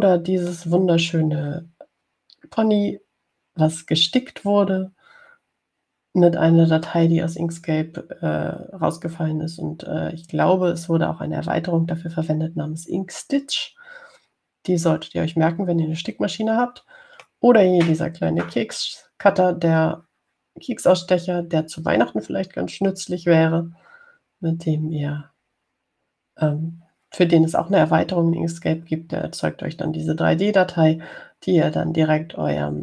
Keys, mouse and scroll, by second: 0.4-2.1 drag, 8.1-18.7 drag.